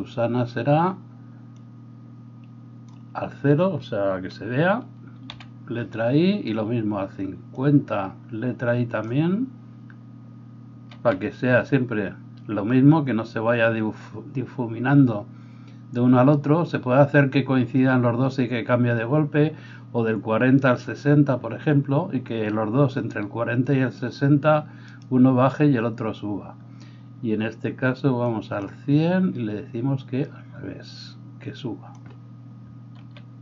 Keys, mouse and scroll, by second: 5.3 typing, 10.9 typing, 24.9-33.4 middle drag, 24.9-33.4 right drag, 33.0 |.